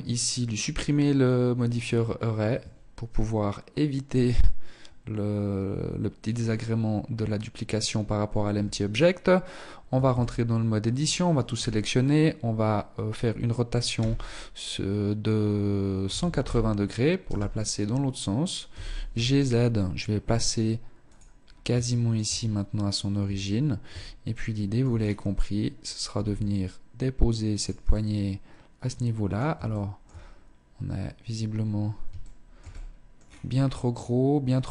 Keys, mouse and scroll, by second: 0.6 scroll down 2, 0.7-1.6 scroll up 6, 1.6 scroll up 1, 7.7 Tab, 9.1 a, 9.3 a, 13.2 r, 17.9 g, 20.6-21.0 scroll up 3, 21.0 shift+middle click, 21.5 scroll up 2, 22.4 Tab, 23.5 shift+middle click, 24.1 scroll down 5, 25.3 g, 27.1 middle click, 28.8 shift+middle click, 29.4 scroll up 3, 31.4 shift+middle click, 31.9 middle click, 32.4-32.7 scroll down 4, 34.0-34.5 scroll up 1.